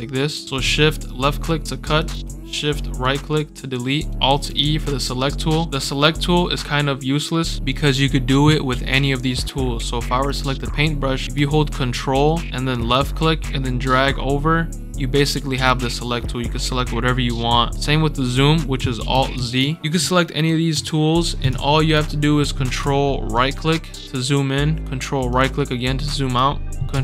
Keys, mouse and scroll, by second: 1.0-1.9 shift+drag, 3.0-4.0 shift+right drag, 4.2 alt+e, 10.2 click, 12.9-17.7 ctrl+drag, 18.7 right click, 19.3 alt+z, 19.8 right click, 23.2 ctrl+right click, 23.9 ctrl+scroll down 2, 24.1 ctrl+scroll up 2, 25.2 ctrl+right click, 26.2 ctrl+scroll up 3.